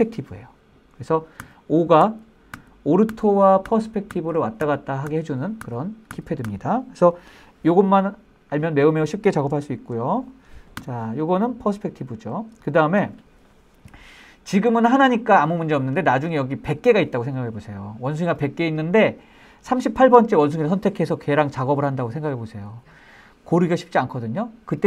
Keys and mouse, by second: 1.6-6.6 typing, 8.9 middle drag, 9.8 shift+middle click, 10.1-10.4 middle drag, 11.0 KP_5, 11.6-12.2 middle drag, 12.9 middle click.